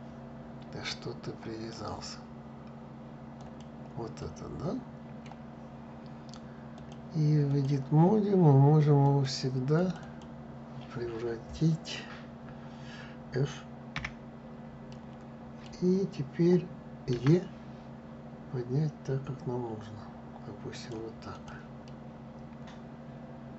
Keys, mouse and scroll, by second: 0.6-3.2 drag, 3.8-6.4 middle drag, 6.4-8.9 drag, 9.4 click, 9.7 click, 13.6 f, 14.6-16.8 middle drag, 16.8 e, 21.0 click, 21.5-23.5 middle drag.